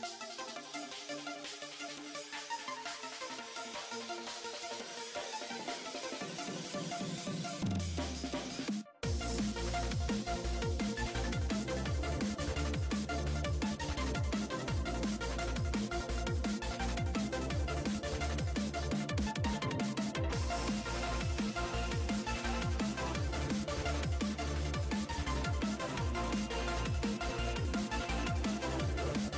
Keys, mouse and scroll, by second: 0.9-1.7 scroll up 3, 1.7-2.6 scroll down 2, 2.6-3.5 scroll down 6, 3.5 middle click, 4.4 click, 5.2-8.2 middle drag, 8.9 click, 9.4-12.4 middle drag, 12.4-13.3 scroll up 8, 13.3-17.5 drag, 21.9-25.1 middle drag, 25.1 click, 25.3-28.0 middle drag, 28.0-29.1 scroll up 3, 29.1-29.3 drag.